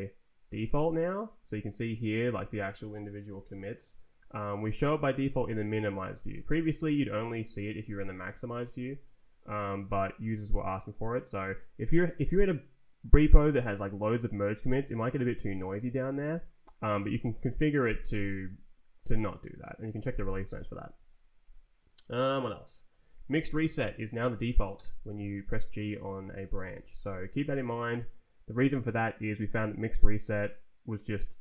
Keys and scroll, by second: 0.4 Down, 1.3 Down, 1.5 Up, 3.3 Down, 4.7 Up, 6.7 shift+=, 7.8 shift+=, 8.3 shift+-, 9.1 Up, 13.1 Down, 13.6 Down, 14.3 Up, 14.8 Up, 15.4 Down, 15.9 Up, 23.3 ctrl+t, 23.6 Left, 24.8 g, 25.5 Down, 26.1 Up, 26.6 Down, 26.9 Up.